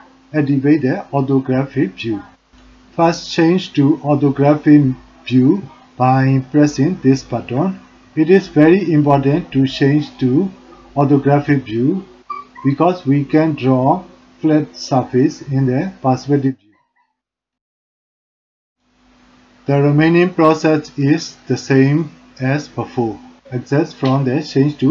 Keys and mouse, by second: 2.9-4.8 middle drag, 14.3 click, 17.6-18.8 drag.